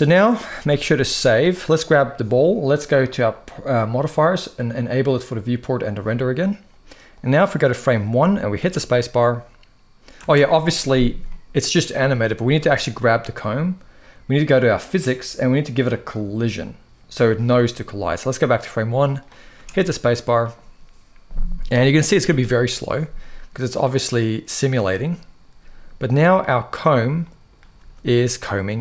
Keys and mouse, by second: 0.3 ctrl+s, 0.6 ctrl+s, 0.8 ctrl+s, 1.4 click, 4.5 click, 5.4 click, 6.9-7.6 drag, 8.3 space, 9.9 space, 11.0-11.4 middle drag, 15.8 click, 18.2-19.0 drag, 19.3 space, 27.0 middle click, 27.5 space, 27.9-28.6 middle drag.